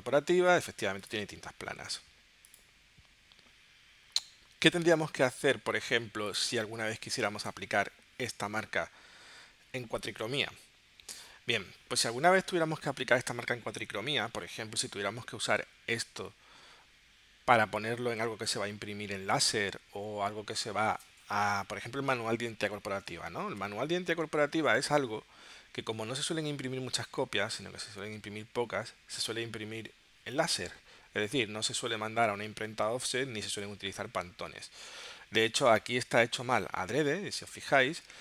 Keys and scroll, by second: 7.2 space, 22.9 super+Tab, 38.1 space.